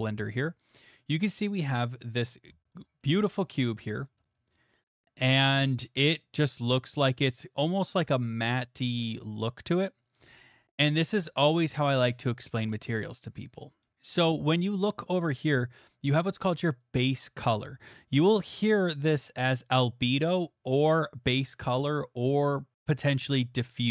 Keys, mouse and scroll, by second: 1.0 click, 2.0 middle click, 2.2 middle click, 2.3 middle click, 3.0 middle click, 10.1 middle click, 13.8-18.0 drag.